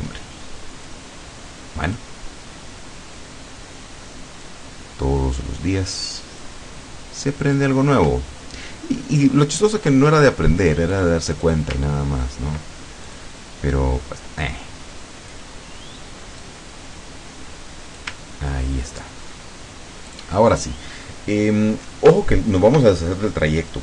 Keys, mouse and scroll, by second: 0.9-2.2 drag, 4.5-6.7 drag, 7.5 click, 8.3-8.7 ctrl+scroll down 2, 11.0 click, 12.1-12.6 ctrl+scroll up 2, 13.1 click, 13.8-15.6 drag, 16.5-18.2 drag, 18.6-19.1 ctrl+scroll down 2, 20.1 click, 22.2-22.5 ctrl+scroll up 2.